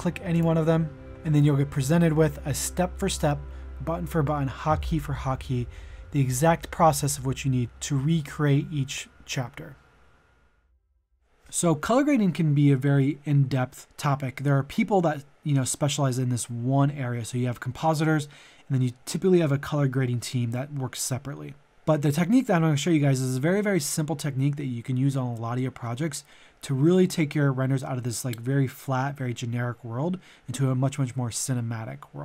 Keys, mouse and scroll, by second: 3.3 click, 3.6 middle click, 6.1 shift+middle click, 7.8 click, 12.0 middle click.